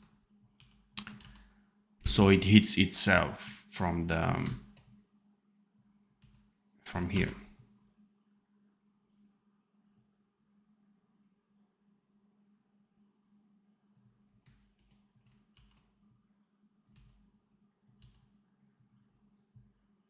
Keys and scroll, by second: 0.5 r, 1.1 v, 1.9 space, 6.1 c, 7.0 v, 14.5 ctrl+b, 15.5 ctrl+b, 16.8 c, 17.9 v.